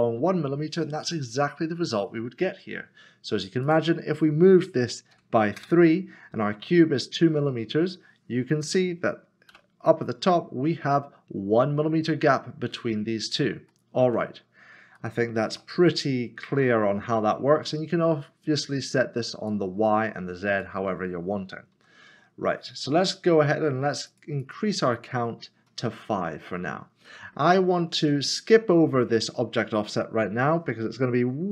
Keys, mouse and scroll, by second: 3.6 click, 5.1 3, 5.6 Return, 8.6 click, 9.5 7, 10.7 scroll down 1, 11.4 7, 12.9 middle click, 14.5 scroll up 1, 15.0 shift+middle click, 15.7 middle click, 18.6 middle click, 20.7 click, 21.7 ctrl+z, 24.1 click, 25.0 click, 26.4 scroll down 1, 27.2 middle click.